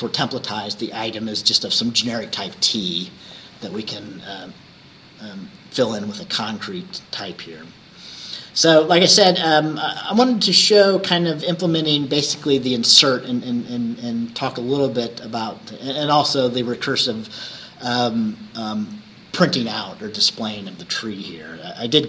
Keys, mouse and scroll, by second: 6.6 scroll down 2, 7.2-7.9 scroll down 4.